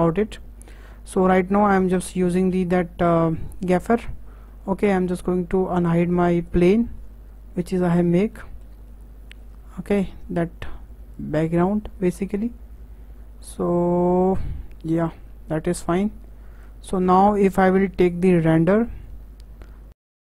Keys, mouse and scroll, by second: 0.0-1.0 drag, 2.1 click, 3.5-6.6 drag, 7.5-8.3 scroll up 4, 8.3-9.9 middle drag, 9.9-10.3 drag, 11.1 click, 16.1 KP_0.